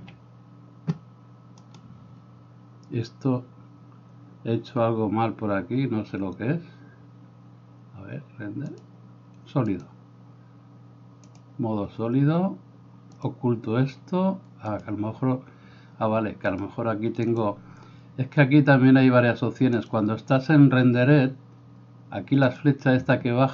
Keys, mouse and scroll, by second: 0.0-8.9 drag, 1.7 right click, 13.2 click, 14.9-16.6 drag, 17.5-20.0 drag.